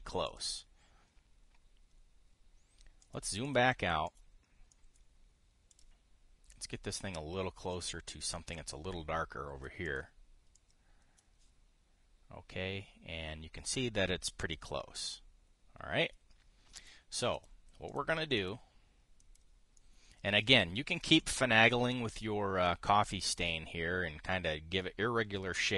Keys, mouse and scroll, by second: 0.9 click, 3.7 click, 4.1 click, 4.7 click, 5.4 click, 6.4 click, 7.2-9.3 drag, 10.5 click, 11.3 click, 17.5 click, 18.0 click, 18.6 click, 19.1 click, 19.9 click, 20.5 click, 21.6 drag, 21.9 click, 22.6 click.